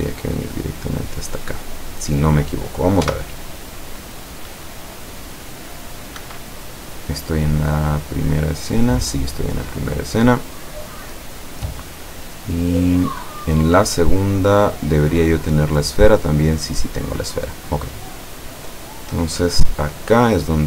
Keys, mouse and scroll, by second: 3.2 p, 6.3 Escape, 7.3-10.9 middle drag, 13.9 click, 14.6 click, 16.0 click, 16.7 click, 17.9 click, 18.4 click.